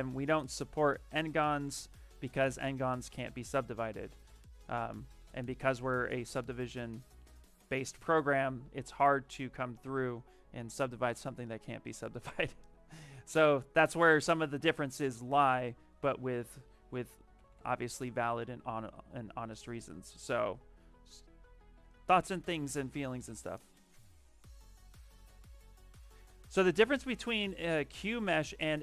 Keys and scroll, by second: 9.7 d, 17.0-17.9 typing.